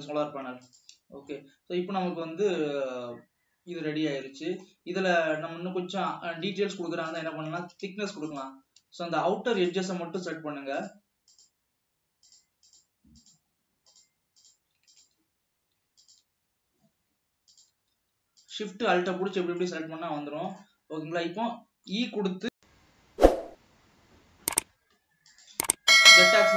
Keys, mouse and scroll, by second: 1.7-5.4 middle drag, 5.4-5.7 scroll down 1, 5.7-7.0 middle drag, 7.0 alt+a, 7.8 click, 8.0 alt+a, 8.5 alt+shift+click, 9.8 alt+shift+click, 10.5 shift+click, 11.6 shift+click, 12.5 shift+click, 13.1 shift+click, 13.5 shift+click, 14.1 shift+click, 15.1 alt+shift+click, 16.3 alt+shift+click, 17.9 alt+shift+click, 18.6 alt+shift+click, 20.1-21.2 middle drag, 21.2-21.9 scroll up 2, 21.9 middle click, 26.1 scroll up 1.